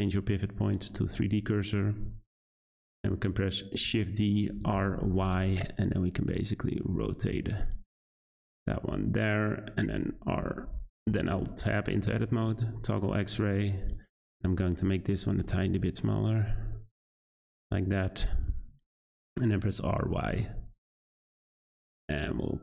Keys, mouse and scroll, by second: 3.8 shift+d, 9.3 click, 10.3 r, 11.1 Tab, 12.4 z, 13.9 click, 15.2 g, 17.3 Tab, 18.3 z, 19.7 r, 22.4 click.